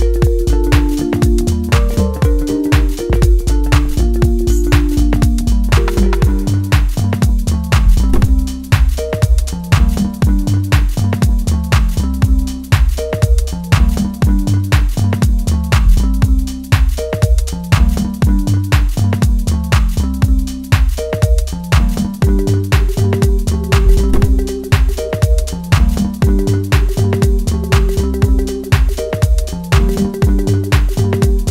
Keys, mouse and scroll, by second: 0.0 Tab, 0.4 s, 1.3 middle click, 2.4 r, 3.6 s, 5.9 Tab, 5.9 1, 6.2 click, 7.0 s, 9.1 ctrl+r, 10.2 s, 12.8 middle click, 14.6 click, 15.6 shift+z, 16.0 click, 16.8 s, 18.3 shift+z, 18.5 middle click, 19.8 s, 21.4 middle click, 22.0 click, 22.9 s, 24.4 click, 25.1 middle click, 26.2 shift+click, 26.7 middle click, 27.2 s, 29.0 middle click, 29.8 click, 30.6 shift+z, 30.9 click.